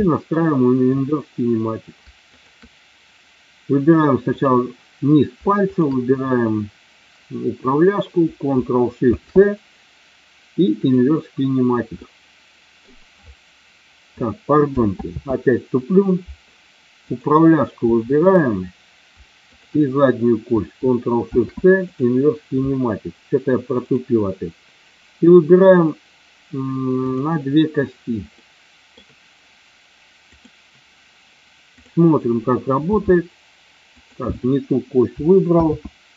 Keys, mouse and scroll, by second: 0.0 middle click, 2.4 shift+click, 5.6 shift+click, 11.0 ctrl+shift+c, 11.9 middle click, 15.1 ctrl+z, 18.1 click, 19.5 shift+click, 21.1 ctrl+shift+c, 23.9 click, 28.4 middle click, 30.4 click, 32.9 g, 33.9 click, 35.6 ctrl+z.